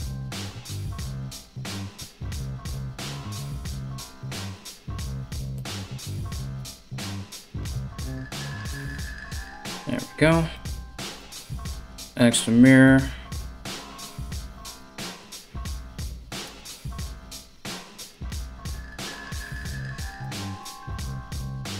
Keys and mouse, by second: 0.3 right click, 1.3 ctrl+right click, 1.9 KP_3, 3.0 g, 6.0 ctrl+r, 6.9-8.6 drag, 7.9 ctrl+r, 8.6-12.9 middle drag, 11.2 alt+x, 12.9 right click, 13.0-21.7 middle drag, 14.4 KP_1, 16.0 right click, 16.2 g, 18.0 g, 18.9 right click, 19.2 g, 20.2 right click, 20.3 g, 21.7 right click.